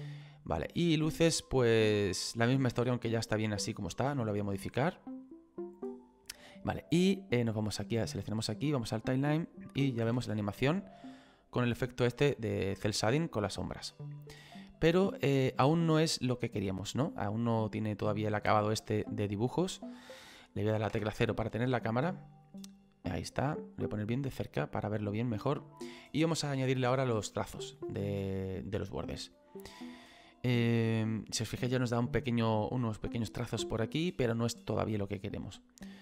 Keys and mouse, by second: 1.2 click, 7.3 click, 9.1 click, 10.2 space, 10.9 middle click, 12.8 middle click, 13.9 shift+middle click, 16.2 click, 18.5 space, 19.3 middle click, 20.9 KP_0, 22.0 click.